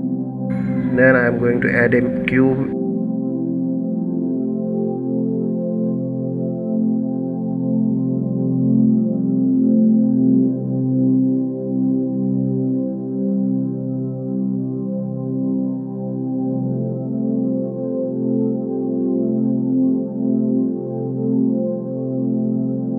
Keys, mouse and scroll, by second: 0.7 shift+a, 5.3 KP_Subtract, 7.6 KP_Subtract, 10.0 KP_Divide, 10.8-11.4 scroll down 12, 11.4 scroll up 1, 11.5-12.6 middle drag, 12.6 KP_1, 13.4-14.3 scroll up 5, 14.3 scroll down 3, 14.8-15.2 scroll up 1, 16.0 g, 19.3 scroll up 2.